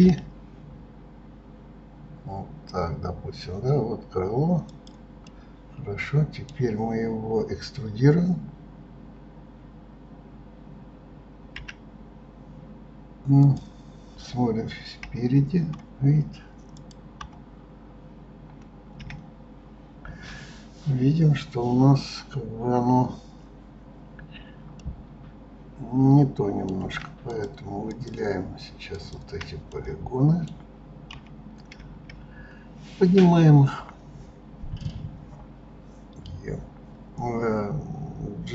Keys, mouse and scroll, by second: 5.0-8.0 middle drag, 11.3 e, 14.8 KP_1, 16.5 click, 16.9 KP_3, 24.5-27.0 middle drag, 27.0 click, 27.6 shift+click, 28.7 shift+click, 29.4-30.9 middle drag, 30.9 KP_3, 31.5 KP_1, 31.5-32.9 scroll up 1, 32.9-34.2 scroll down 2.